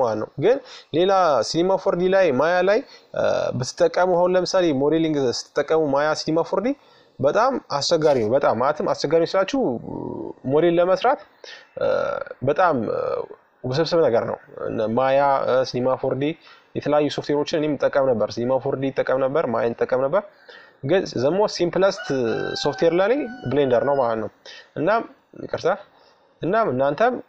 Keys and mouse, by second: 2.2-3.9 drag, 5.8-7.4 drag, 7.4 Tab, 9.6 ctrl+r, 14.3 ctrl+r, 25.4 middle click, 27.0 ctrl+z.